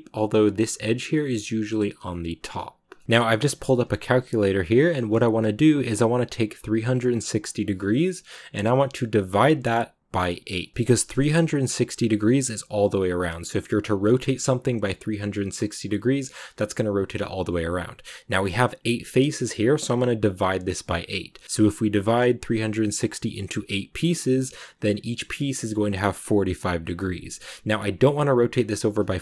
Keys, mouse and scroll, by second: 2.8 shift+middle click, 3.0 scroll down 1, 11.7 r, 13.7 r.